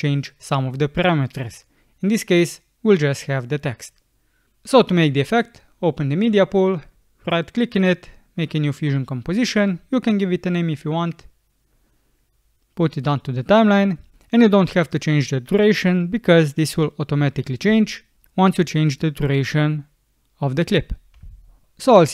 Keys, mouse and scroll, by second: 0.7 click, 17.8 alt+click.